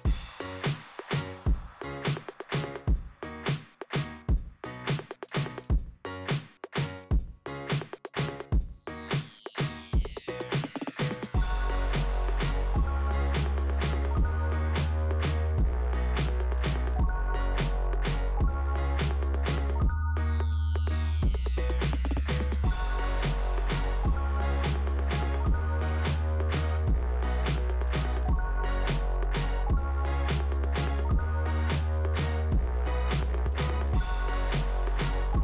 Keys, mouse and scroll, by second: 5.9 click, 7.1 click, 8.3 click, 11.2 click, 16.0 click, 18.0 click, 21.4 click, 23.2 click, 24.7 click, 24.8 click, 26.0 click, 26.2 click, 27.8 scroll up 2, 29.0 click, 31.3 click, 33.3 click, 33.4 click, 33.5 click, 33.8 click, 34.2 double click, 34.6 click, 34.6 click.